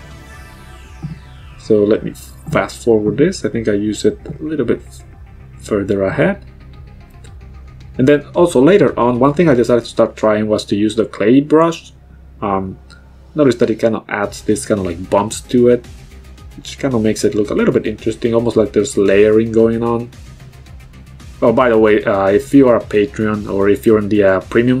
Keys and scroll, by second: 4.5 ctrl+z.